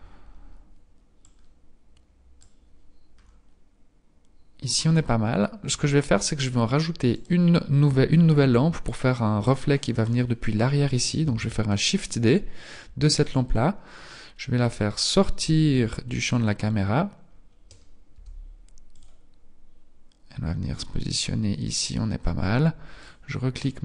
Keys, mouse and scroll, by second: 1.1 click, 3.0-4.5 scroll up 4, 4.7-5.7 scroll down 3, 5.7-6.5 scroll up 1, 6.9 right click, 11.3 shift+d, 14.0-14.5 scroll down 4, 15.2 g, 16.5-17.3 scroll down 2, 17.3-17.6 scroll down 1, 18.2 g, 22.7 click.